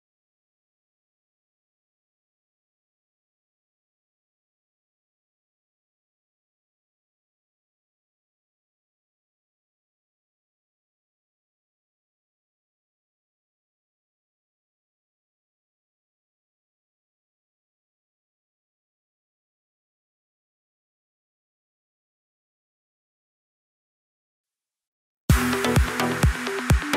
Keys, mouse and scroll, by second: 2.0 click, 3.1-5.0 drag, 5.2 scroll down 1, 5.4-5.9 middle drag, 5.9 scroll down 1, 6.2-6.9 middle drag, 6.9 click, 7.5 KP_1, 7.8 KP_3, 8.4 drag, 8.6-9.2 scroll up 2, 9.6 scroll up 2, 9.6-11.3 drag, 12.0 click, 12.5 click, 15.7 scroll up 3, 15.9 shift+middle click, 16.4 s, 17.4 s, 19.9 click, 20.9 click, 21.1 scroll down 6, 21.3-23.3 middle drag, 23.3-24.8 scroll down 2, 24.8-25.6 scroll down 1, 25.6-26.9 scroll down 1.